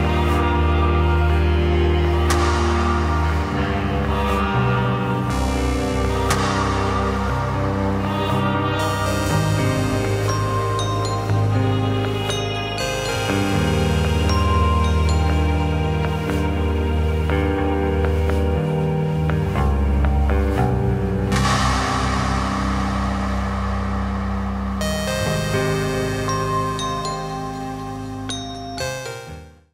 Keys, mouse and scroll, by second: 12.4-13.8 drag.